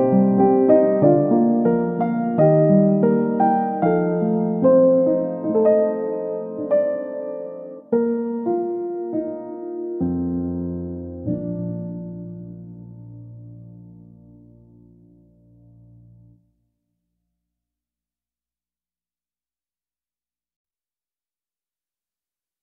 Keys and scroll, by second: 19.0-19.9 typing, 20.0 Return.